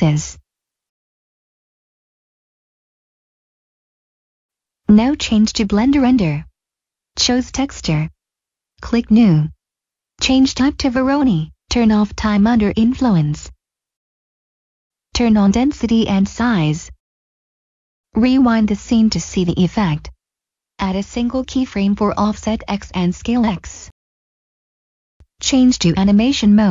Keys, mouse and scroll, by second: 0.6 click, 2.9 Delete, 4.3 Return, 4.7 click, 9.0 click, 14.1 click, 18.8 click, 20.8 right click, 22.2 click, 23.2 right click, 24.7 middle click, 25.3 click, 26.2 click.